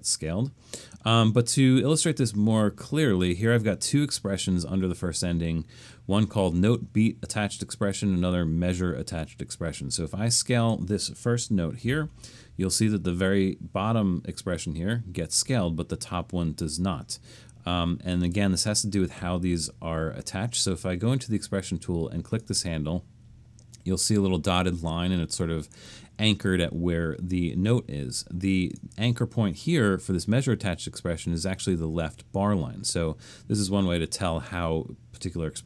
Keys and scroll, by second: 11.6-12.4 typing, 13.8-14.5 typing.